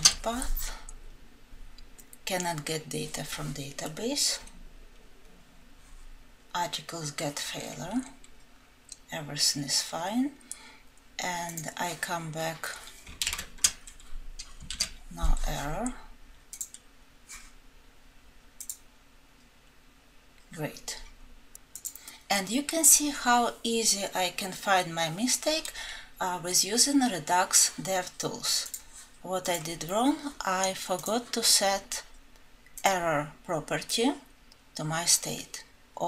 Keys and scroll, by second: 12.8 ctrl+z.